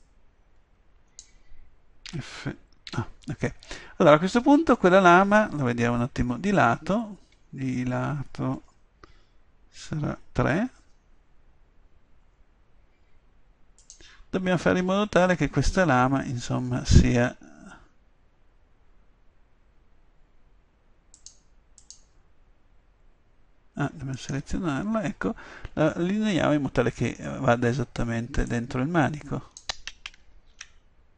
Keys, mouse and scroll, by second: 2.1 f, 2.9 a, 6.5 KP_3, 7.4 KP_1, 10.5 KP_3, 13.8-15.7 middle drag, 18.9-20.6 middle drag, 21.2-24.2 drag, 24.2-25.8 middle drag, 26.0-28.5 middle drag, 29.4-30.6 drag, 30.6 ctrl+z.